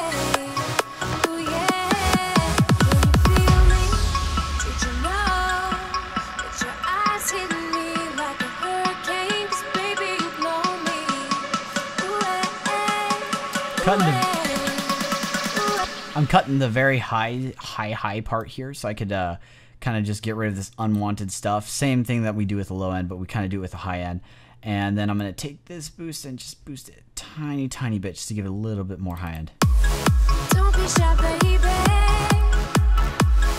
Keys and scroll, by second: 15.6 space.